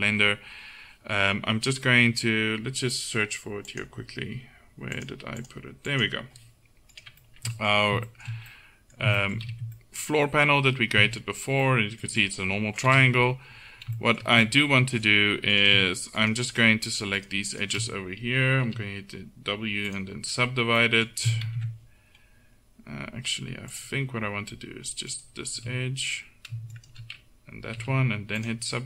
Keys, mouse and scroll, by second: 3.8-7.3 drag, 7.0 right click, 7.3-9.0 middle drag, 9.6 z, 11.1 Tab, 13.0 KP_7, 15.6-18.7 drag, 18.7 w, 21.5 ctrl+z, 27.8 w.